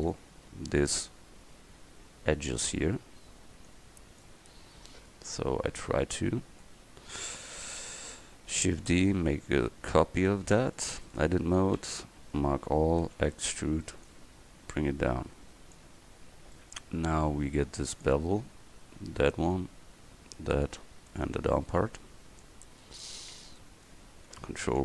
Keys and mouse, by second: 0.1 Tab, 3.7-4.4 middle drag, 5.0-5.5 middle drag, 7.6 KP_1, 8.9 shift+d, 10.5 Tab, 11.8 a, 12.1 a, 13.1 e, 18.0 click, 19.3 right click.